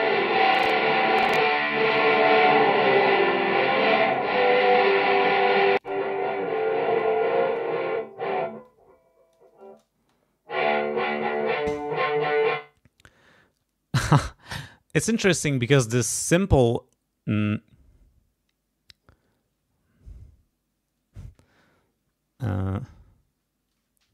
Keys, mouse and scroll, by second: 0.5-1.6 drag, 1.8 click, 2.8 click, 3.9 click, 4.6 click, 5.7 click, 6.5 click, 7.0-7.7 scroll up 2, 8.6 click, 9.6 space, 12.4 space.